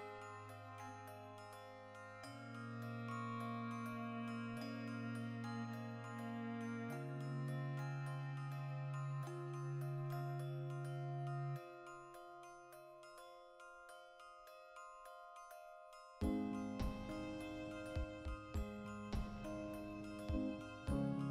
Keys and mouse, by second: 0.1 g, 1.2 shift+click, 2.1 Tab, 2.3 right click, 2.7 Tab, 3.3 3, 3.5 alt+right click, 3.9 ctrl+KP_Add, 4.2 ctrl+KP_Subtract, 4.8 g, 5.7 shift+click, 5.8 Tab, 5.9-9.5 middle drag, 9.5 right click, 9.9 KP_Decimal, 10.1-11.1 middle drag, 11.1 click, 11.3-20.0 ctrl+middle drag, 12.1 KP_Decimal, 13.4 right click, 18.9 KP_Decimal, 20.0 click, 20.2-21.3 middle drag, 20.4 KP_Decimal.